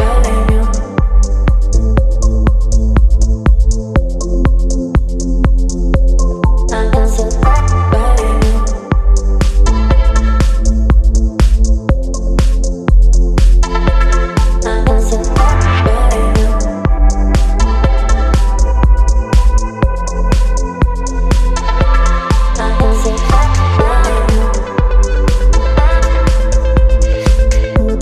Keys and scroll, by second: 13.8 Return, 17.1 space, 20.5 t, 22.6-24.2 typing, 25.3-27.3 typing, 27.3 ctrl+a.